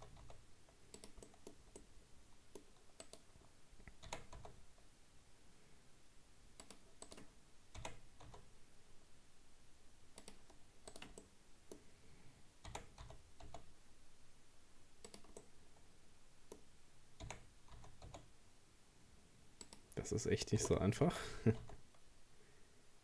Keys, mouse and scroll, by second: 1.3-3.0 middle drag, 3.0 right click, 4.1 r, 7.1 right click, 7.8 r, 10.9 right click, 11.2-12.7 middle drag, 12.7 r, 15.4-17.2 middle drag, 17.2 r, 20.6 g.